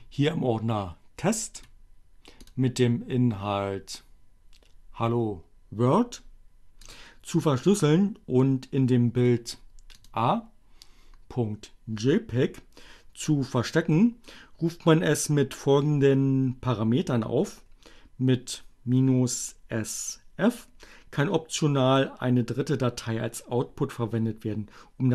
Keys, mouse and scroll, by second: 1.6 right click, 1.9 middle click, 2.5 click, 6.8 click, 10.0 click.